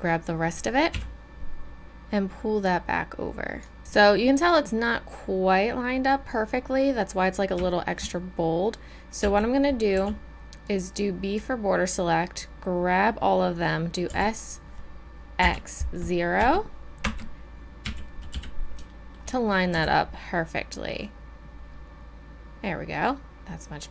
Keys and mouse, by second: 1.0 KP_1, 3.8 KP_1, 9.2 z, 9.9 b, 14.0 s, 17.8 a, 18.3 z, 18.8 middle click, 19.7 z.